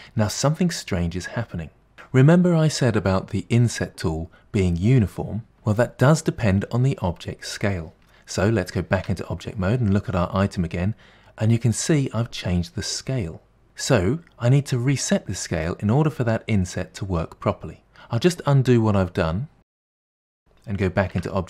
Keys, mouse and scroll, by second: 0.0-1.9 middle drag, 9.0 Tab, 18.0 Tab, 19.0 ctrl+z, 19.4 ctrl+z, 19.7 ctrl+z, 21.2 Tab.